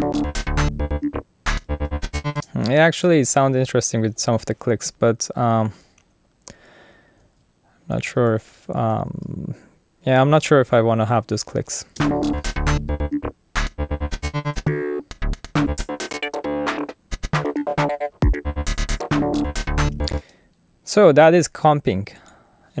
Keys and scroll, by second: 2.3 space, 7.2 super+z, 7.9 shift+super+z, 12.0 space, 20.2 space.